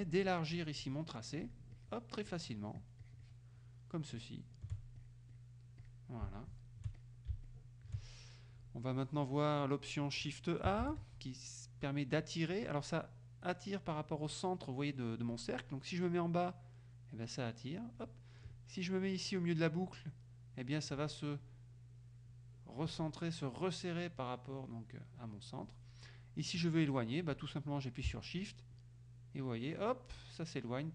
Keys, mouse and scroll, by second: 0.6 shift+click, 1.5 shift+click, 2.3 shift+click, 4.2 shift+click, 5.1 shift+click, 5.4 shift+click, 5.9 shift+click, 7.0 shift+click, 7.5 shift+click, 10.9 shift+a, 15.4 click, 16.2-18.3 drag, 19.9 click, 21.5-23.1 drag, 23.6-25.0 drag, 25.2 click, 28.8-30.9 shift+drag.